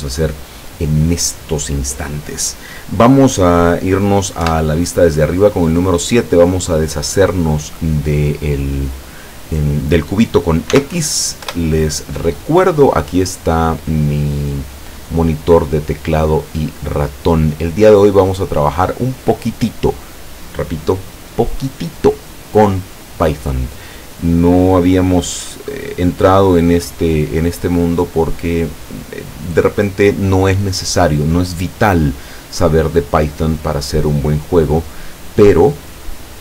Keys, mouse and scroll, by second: 4.5 KP_7, 10.8 x, 11.5 Return, 15.0 click, 15.6-18.9 drag.